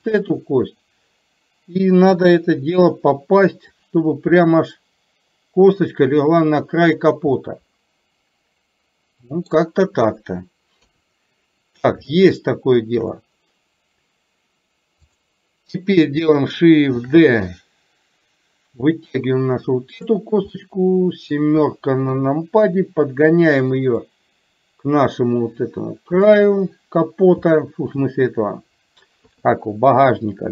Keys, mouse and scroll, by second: 0.1 shift+click, 2.1 KP_7, 3.8-7.1 drag, 7.5-9.6 middle drag, 10.8 KP_3, 12.1 shift+middle click, 15.1 click, 17.2 shift+d, 20.6 middle click, 22.1 KP_7, 24.1-26.3 drag, 27.6 shift+middle click, 29.2 KP_3.